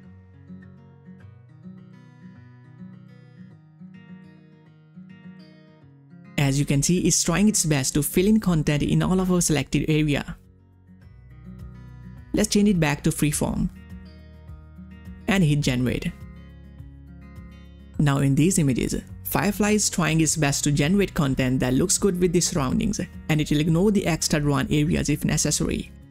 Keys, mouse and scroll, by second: 0.1-0.5 ctrl+scroll up 1, 2.7 click, 11.4 click, 23.2 click, 23.2 click, 25.4 click, 25.4 click.